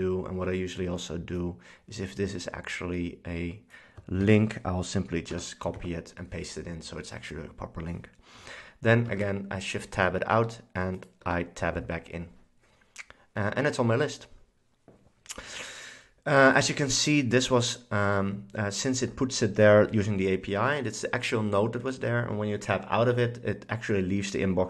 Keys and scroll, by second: 4.3 super+c, 5.4 BackSpace, 5.8 super+v, 9.2 shift+Tab, 11.3 Tab.